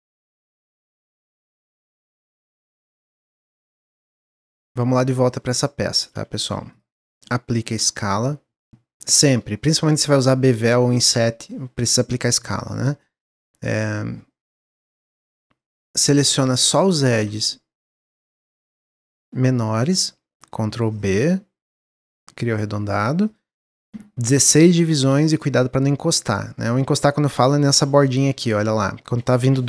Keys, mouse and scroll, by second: 0.1-1.3 middle drag, 1.3-3.9 drag, 4.7-5.2 middle drag, 5.2 click, 6.1 x, 6.6 click, 7.7-10.9 drag, 14.8 Tab, 15.6 click, 16.4 shift+click, 16.9 middle click, 17.7 shift+click, 18.2 shift+click, 18.5-20.9 middle drag, 20.9 ctrl+b, 23.5-25.4 middle drag, 25.4-27.0 shift+drag, 27.0-27.4 scroll up 1, 27.4-28.2 shift+middle drag, 28.2-29.6 scroll up 1.